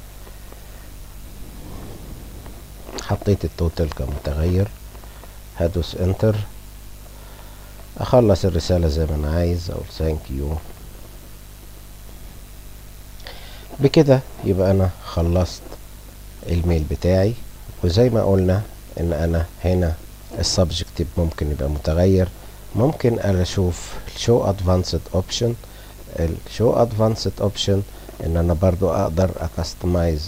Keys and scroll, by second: 5.2 Return, 8.8 shift+t, 9.6 h, 10.4 a, 11.5 k.